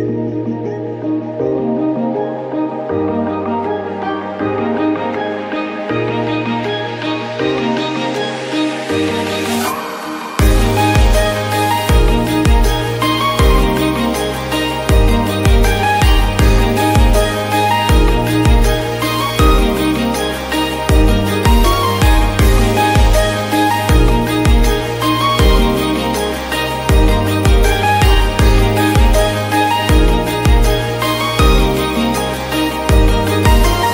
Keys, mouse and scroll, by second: 0.3 ctrl+s, 1.1 scroll up 1, 1.5 scroll down 2, 1.7 shift+middle click, 1.9 click, 2.2 shift+a, 3.2 s, 4.4 KP_1, 4.7 scroll up 1, 5.8 scroll down 6, 5.9 s, 8.3 scroll up 3, 8.6 shift+middle click, 8.9 r, 10.4 middle click, 10.6-11.0 scroll up 3, 11.0-11.7 scroll down 14, 11.7 s, 12.2-12.5 scroll up 4, 13.1-13.8 drag, 13.8 s, 15.4 scroll, 15.6 shift+middle click, 15.7-16.0 scroll up 2, 16.0 g, 17.5 scroll down 7, 17.7 shift+middle click, 18.1 r, 19.4 scroll up 5, 19.7 r, 21.3-21.8 scroll down 4, 21.9-22.3 scroll up 4, 22.5-22.9 shift+middle drag, 22.9 g, 24.1 scroll down 7, 24.3 click, 24.8 Tab, 25.4 ctrl+r, 28.5-28.9 scroll down 3, 28.9-30.1 scroll up 3, 29.1 shift+middle click, 29.4 shift+middle click, 30.1 alt+z, 30.3 scroll up 1, 30.4 shift+middle click, 30.7 1, 30.9 click, 31.1 shift+middle click, 31.5 e, 32.3 scroll up 2, 32.5 shift+middle click, 32.9 ctrl+r, 33.4 s.